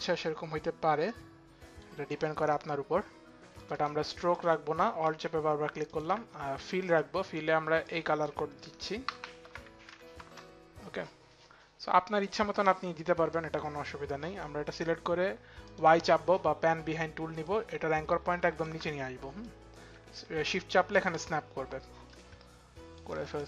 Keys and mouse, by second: 2.8 click, 4.0 alt+click, 5.7 alt+click, 6.2 alt+click, 7.5 click, 9.0 ctrl+a, 9.0 ctrl+v, 9.8 Return, 11.9 click, 15.2 click, 17.0 click, 19.4 click, 22.6 click.